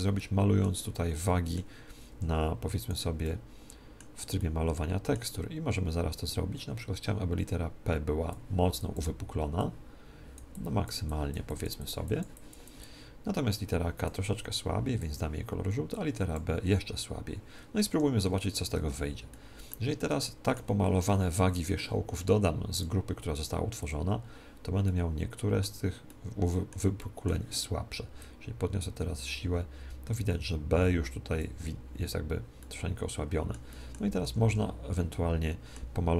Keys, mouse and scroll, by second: 0.2-2.6 middle drag, 2.0 f, 2.8-4.8 drag, 3.1-6.2 middle drag, 7.0-17.8 drag, 17.8 Escape, 18.7 ctrl+Tab, 19.2-21.8 middle drag, 22.7-24.5 drag, 24.8-28.6 middle drag, 28.1-30.0 drag, 32.5-36.1 middle drag, 34.2 ctrl+Tab, 35.6 ctrl+Tab.